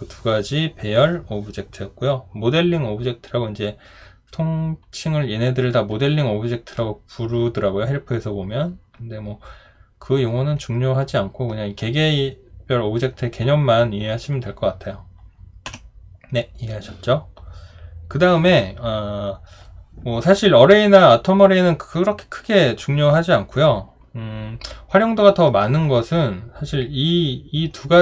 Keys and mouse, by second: 15.7 Delete.